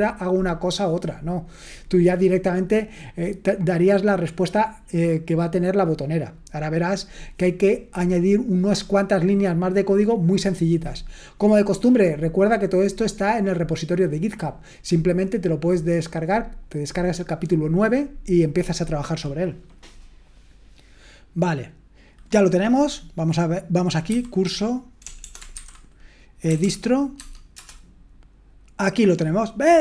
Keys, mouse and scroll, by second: 23.0-24.8 drag, 26.3-27.1 typing, 27.2 Tab, 27.5 Return.